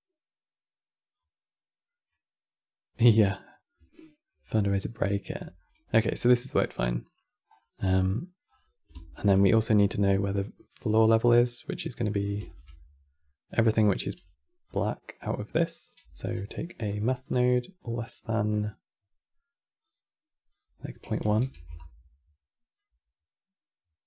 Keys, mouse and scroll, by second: 1.6-2.8 middle drag, 3.0-7.2 middle drag, 7.2-7.9 scroll down 6, 7.9 middle drag, 8.2-8.8 scroll up 11, 8.8 ctrl+shift+click, 10.3-12.2 middle drag, 12.2 ctrl+shift+click, 12.5-13.7 middle drag, 13.7 q, 15.4 click, 15.8 x, 16.1 q, 17.6-22.5 drag, 22.5-24.0 middle drag.